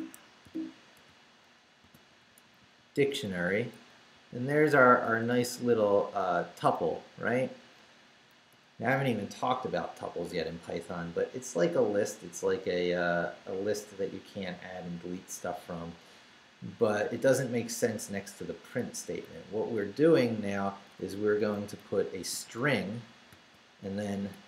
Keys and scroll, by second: 0.4 i, 2.1 Right, 4.1 x, 5.1 BackSpace, 5.7 Right, 6.2 BackSpace, 6.8 Left, 8.3 Left, 19.0 Right, 21.8 shift+', 23.1-24.4 typing.